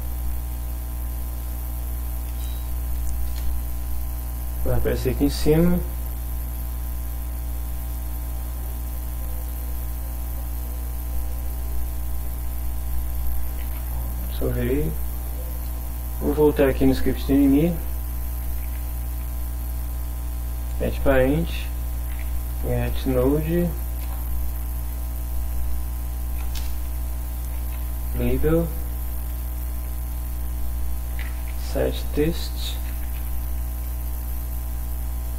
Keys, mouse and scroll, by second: 1.4 click, 2.3 KP_0, 3.3 KP_Enter, 9.4 click, 10.5 click, 11.2 click, 13.5 ctrl+s, 14.6 click, 16.7 click, 18.3-19.4 typing, 20.7 Return, 21.2-23.1 typing, 24.0 Return, 25.4 shift+9, 26.6-31.8 typing, 32.9 x, 33.2 t, 34.1 shift+9.